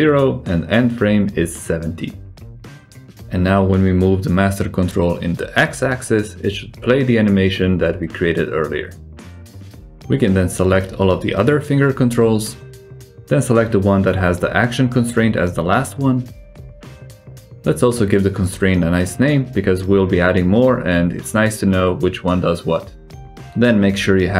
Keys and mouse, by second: 2.6 g, 4.1 alt+z, 4.6 g, 8.7-9.1 drag, 9.3 alt+z, 9.7 shift+drag, 10.5-11.1 drag, 12.3 shift+drag, 13.0-13.6 shift+drag, 14.5-14.8 shift+drag, 15.7-16.0 shift+drag, 16.4 shift+drag, 17.6 click, 18.8-22.6 drag.